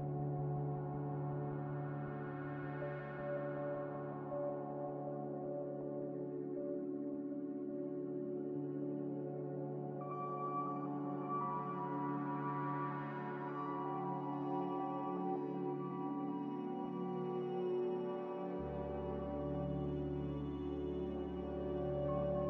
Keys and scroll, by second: 0.5-1.4 typing, 5.5 ctrl+z, 5.6 ctrl+z, 5.7 ctrl+z, 5.9 ctrl+z, 5.9 ctrl+z, 12.1-12.9 typing, 14.3-15.7 typing, 18.0-18.8 typing, 21.7-22.4 typing.